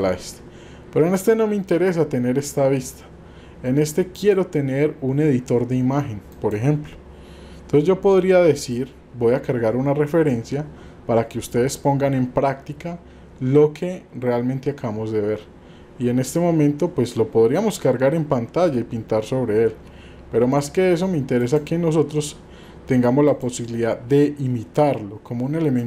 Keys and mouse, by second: 4.2-6.5 drag, 21.4-21.7 drag.